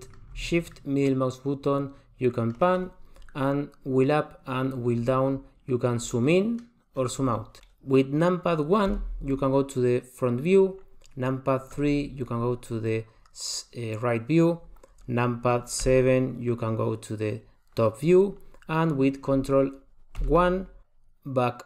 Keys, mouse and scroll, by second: 0.7 shift+middle click, 3.8-4.5 scroll up 6, 4.5-5.9 scroll down 10, 5.9 scroll down 2, 6.9 scroll down 1, 7.0-8.8 scroll down 5, 8.9 KP_1, 11.8 KP_3, 15.8 KP_7, 20.2 ctrl+KP_1.